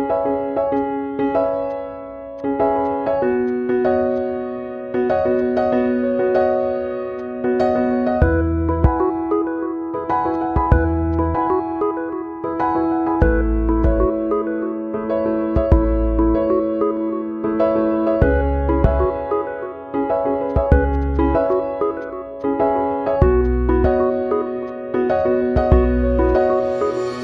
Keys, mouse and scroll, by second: 1.2 right click, 2.3 click, 3.7 right click, 4.5 click, 5.8 click, 6.1 ctrl+d, 7.5 ctrl+alt+-, 9.2 click, 11.9 space, 12.0 click, 12.1 space, 13.2 click, 14.3 space, 15.8 space, 16.6 click, 17.9 space, 18.0 click, 18.1 space, 18.9 click, 19.3 space, 19.4 click, 19.5 space, 20.9 click, 21.1 space, 21.9 space, 22.5 click, 23.0 space, 23.1 click, 24.1 space, 25.2 ctrl+alt+-.